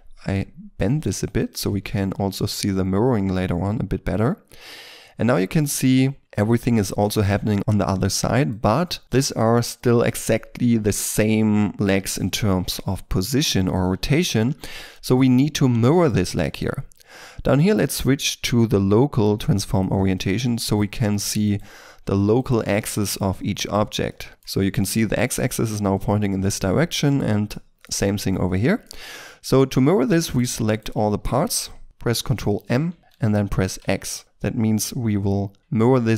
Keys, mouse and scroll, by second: 0.1-1.6 scroll down 1, 1.6 Tab, 2.0 scroll down 1, 2.3 shift+middle click, 2.6 shift+middle click, 6.8 shift+middle click, 9.0 middle click, 16.4 shift+middle click, 20.1 middle click, 20.7 right click, 24.0 middle click, 26.9 right click, 27.4 middle click, 30.2 shift+right click, 32.8 ctrl+m, 33.7 x, 35.6 Return, 35.8 middle click.